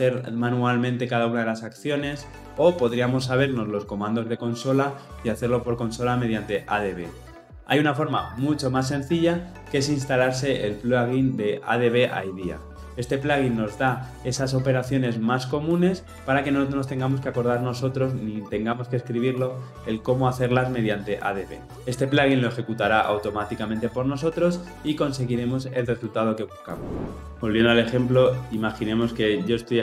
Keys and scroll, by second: 28.2 shift+F10.